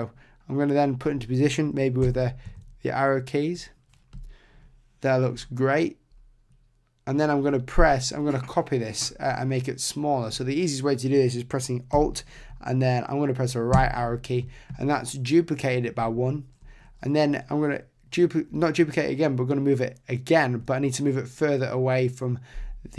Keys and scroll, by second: 2.0 Left, 13.7 alt+Right.